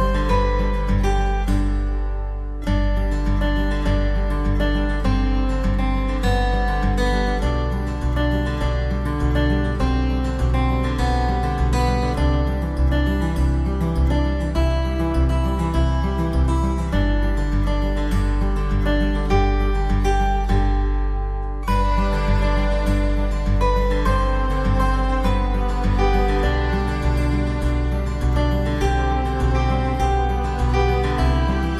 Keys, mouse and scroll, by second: 4.0 s, 16.8 3, 25.1 1.